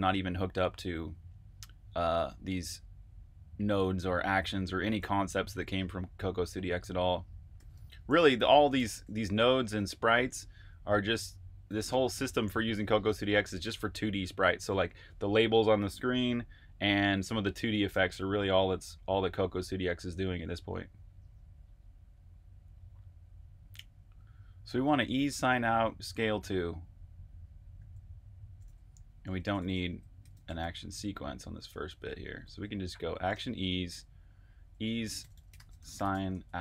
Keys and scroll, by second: 5.1-10.3 typing, 12.0 ↻, 17.8-19.9 typing, 22.0 typing, 27.7-30.8 typing, 31.8 Delete, 32.1-33.6 typing, 35.2-36.6 typing.